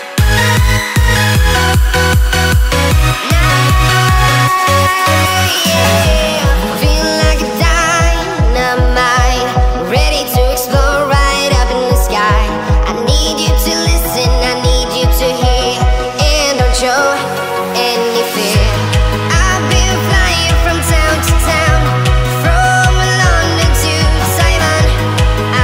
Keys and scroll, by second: 2.9 ctrl+z, 3.5 ctrl+Return, 6.7-8.8 z, 7.4 z, 8.8-9.7 space, 20.4-20.9 space, 21.2-21.5 space.